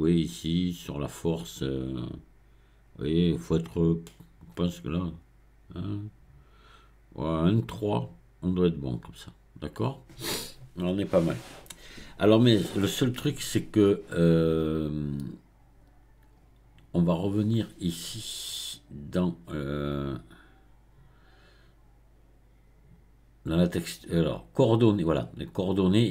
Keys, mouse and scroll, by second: 19.9 click, 25.9-26.1 drag.